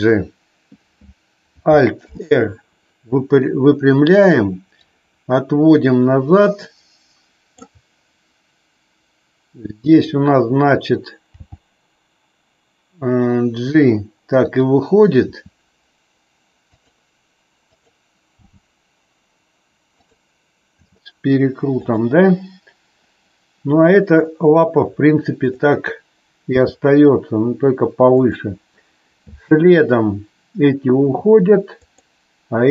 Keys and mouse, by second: 1.9 alt+r, 4.8-7.6 drag, 11.3 g, 15.3 r, 16.7 click, 17.7 click, 18.4 g, 19.9 click, 20.8 r, 21.8 click, 25.4 click, 26.4 g, 31.8 click.